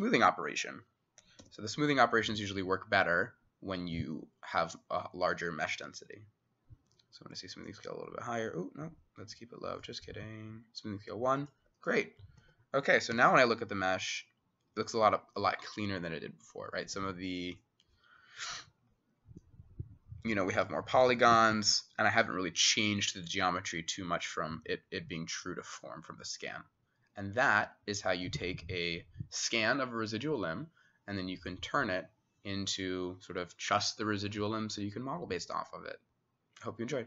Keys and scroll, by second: 1.4 ctrl+f, 12.4 Escape, 13.2 w, 20.7 w, 21.2 w.